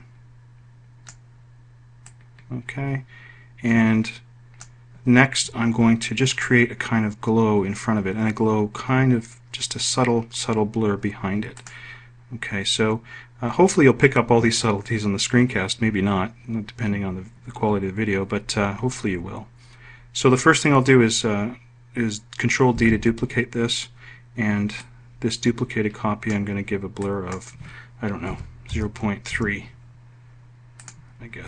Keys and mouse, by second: 3.0-4.3 drag, 23.6 ctrl+d, 29.2 0, 29.6 ., 30.2 3.